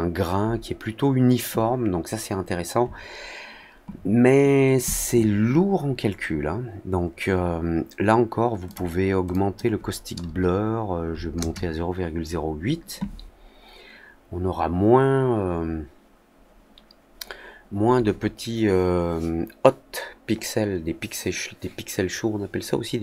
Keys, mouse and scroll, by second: 8.6 click, 9.2 click.